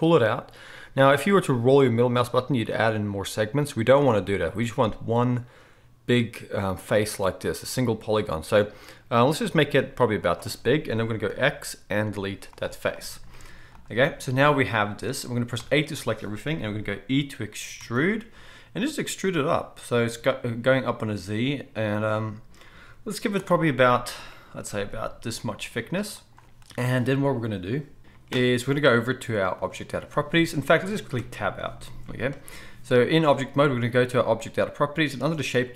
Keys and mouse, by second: 10.3-14.3 right drag, 11.3 x, 13.4 z, 14.3-18.8 drag, 15.6 a, 17.8 e, 18.8-35.7 right drag, 24.6 g, 29.6 click, 29.6 middle click, 31.2 Tab.